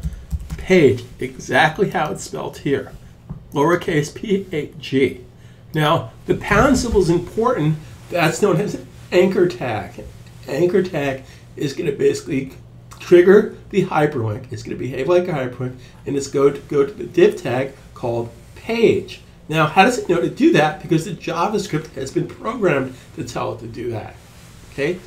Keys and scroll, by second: 0.0-0.4 typing.